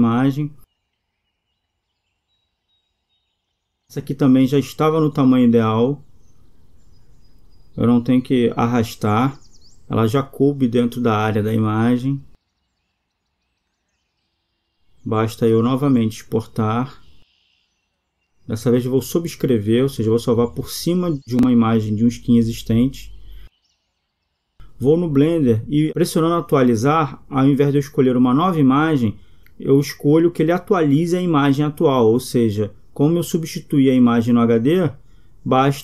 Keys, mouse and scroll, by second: 26.7-28.6 drag, 31.1-32.2 drag.